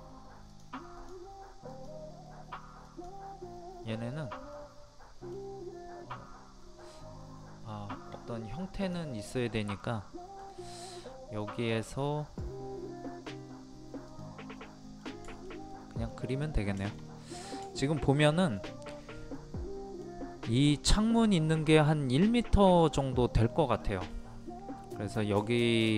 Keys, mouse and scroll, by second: 0.5 click, 4.5-5.6 middle drag, 8.8 click, 9.8 middle click, 10.6-11.2 scroll up 1, 11.7 middle click, 14.1 click, 14.6 middle click, 15.3 shift+middle click, 15.5 scroll down 1, 15.7 middle click, 16.1 scroll down 1, 16.8 shift+middle click, 19.0-19.4 scroll up 1, 19.4-20.5 middle drag, 25.4 shift+middle click.